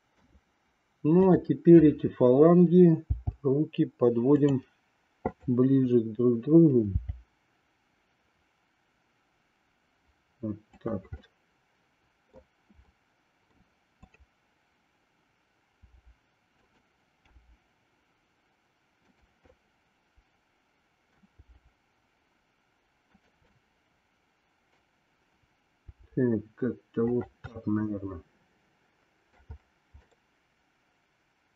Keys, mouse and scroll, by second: 3.0 g, 5.2-6.3 drag, 7.0 g, 11.2-12.5 middle drag, 13.1 middle click, 13.9-15.3 drag, 15.8 r, 17.2 g, 19.7-21.2 middle drag, 21.5 g, 23.5-24.8 middle drag, 25.8 r, 27.6-29.5 middle drag, 30.1-31.5 middle drag.